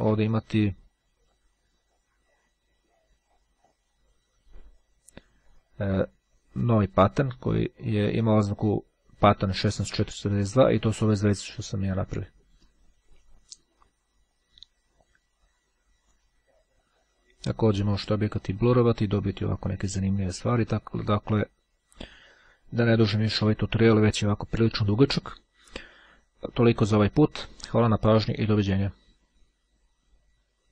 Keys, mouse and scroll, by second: 2.4-3.4 scroll up 2, 3.4-4.3 scroll up 1, 8.8-10.7 drag, 14.9-16.7 drag, 16.9-20.2 drag, 20.3 click.